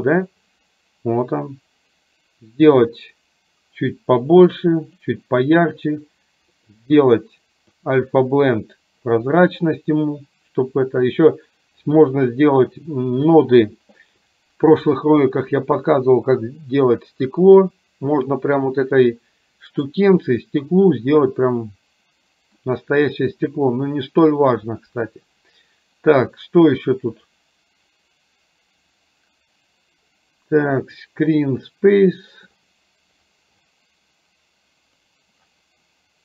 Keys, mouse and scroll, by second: 2.9-5.0 drag, 6.7-8.2 drag, 27.5-31.0 drag, 35.2 drag.